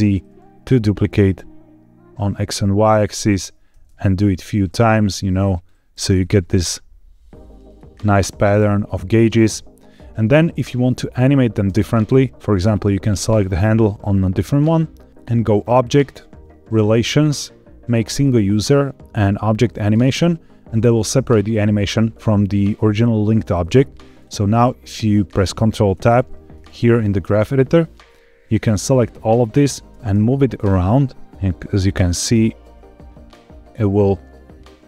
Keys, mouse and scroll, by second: 3.0 click, 3.7 alt+d, 3.9 shift+z, 5.5 click, 6.0 alt+d, 6.1 shift+z, 7.6 click, 8.1 space, 11.6 space, 12.6 click, 13.0 click, 15.4-20.2 drag, 24.0 click, 25.8 ctrl+Tab, 27.6-28.4 scroll down 3, 28.6 click, 29.8 g, 30.1 y.